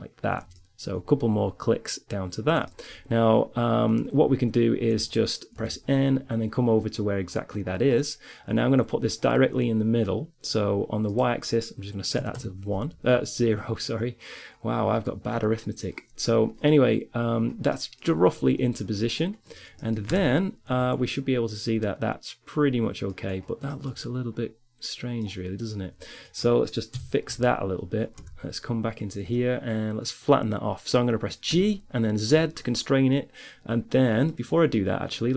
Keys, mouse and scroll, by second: 0.8 click, 0.9 middle click, 1.0 click, 1.2 middle click, 2.0-4.9 middle drag, 4.9 n, 11.3-13.2 drag, 17.3-19.9 middle drag, 20.1 Tab, 20.8 z, 22.9 middle click, 23.5 middle click, 24.6-26.3 middle drag, 26.3 KP_3, 26.8 z, 27.8 Tab, 31.7 g, 35.1 click.